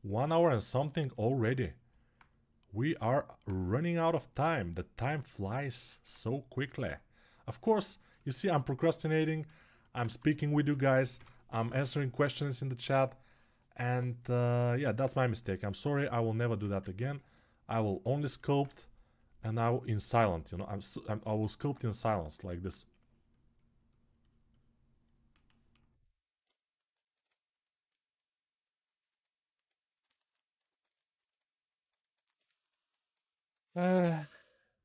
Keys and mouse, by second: 1.2-6.3 right drag, 5.7 alt+q, 9.0 alt+q, 9.8 1, 10.4 [, 10.6 [, 15.1-16.4 ctrl+drag, 16.6 alt+q, 17.6-31.6 alt+shift+drag, 26.9 2.